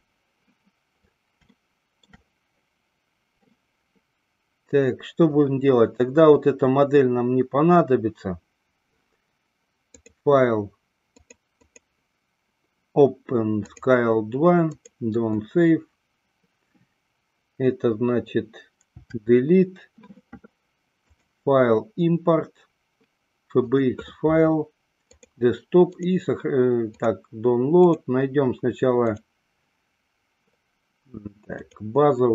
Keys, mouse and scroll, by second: 1.7 shift+middle click, 5.6-6.6 drag, 10.0-11.3 drag, 11.7-15.6 drag, 19.0 Delete, 21.1-24.4 drag.